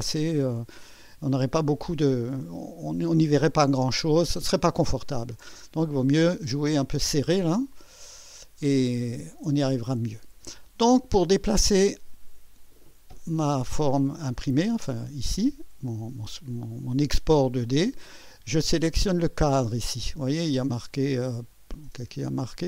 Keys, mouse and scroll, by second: 4.0-5.2 scroll up 3, 5.7-6.0 scroll up 1, 6.4 scroll down 1, 7.7 right click, 8.7 right click, 9.2-10.8 middle drag.